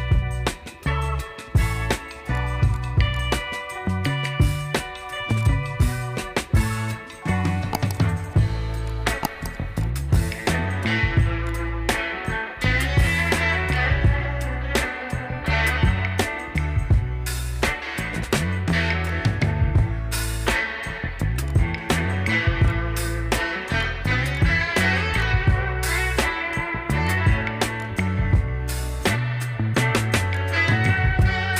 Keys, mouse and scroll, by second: 2.1-13.5 drag, 17.0 click, 22.5 right click, 23.5-30.1 drag, 30.1 right click.